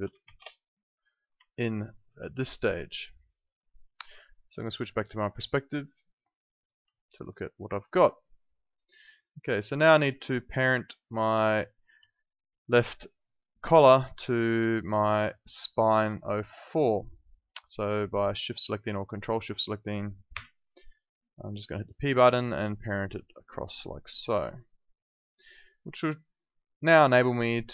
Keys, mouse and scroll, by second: 0.0-0.7 typing, 1.6 alt+middle click, 2.0 alt+right click, 3.6 alt+middle click, 4.9 click, 7.0 alt+click, 7.2 alt+right click, 7.5 alt+middle click, 7.8 alt+click, 9.0 alt+right click, 9.5 alt+click, 9.7 alt+right click, 10.1 alt+middle click, 11.4 click, 12.1 alt+click, 15.0 shift+click, 16.0 alt+click, 18.8 alt+click, 20.3 p, 21.7 alt+click.